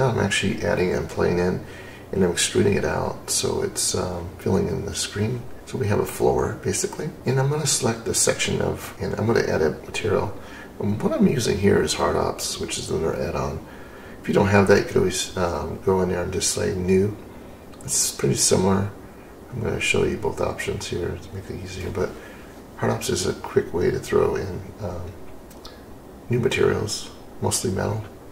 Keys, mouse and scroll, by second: 1.7 click, 6.4 click, 9.8 click, 14.1 alt+m, 18.5-23.8 middle drag, 24.0-24.5 scroll up 3, 24.5-25.1 scroll down 4.